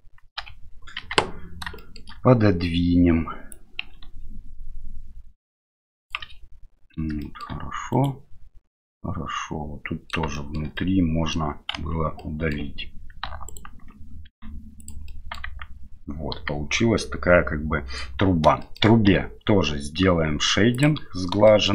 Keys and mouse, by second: 0.4 l, 1.0 KP_1, 1.8 shift+middle click, 3.6-6.1 drag, 7.2 shift+middle click, 7.9 right click, 8.9-10.1 middle drag, 10.3 shift+middle click, 10.7 middle click, 11.7 KP_Divide, 12.2 middle click, 13.5 alt+right click, 14.3 x, 15.1 middle click, 15.4 Tab, 16.3 KP_1, 18.6 shift+middle drag, 19.1 q, 21.5 shift+middle drag.